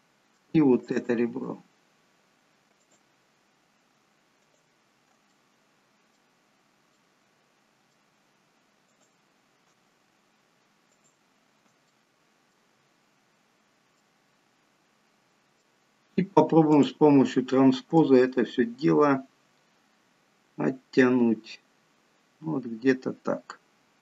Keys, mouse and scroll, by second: 1.5 shift+click, 2.8 shift+click, 5.4 middle click, 6.5-7.3 scroll up 4, 7.0 middle click, 9.0 shift+click, 11.1 shift+click, 11.9 middle click, 12.8-13.9 scroll down 10, 14.0 middle click, 17.1 click, 18.0 click.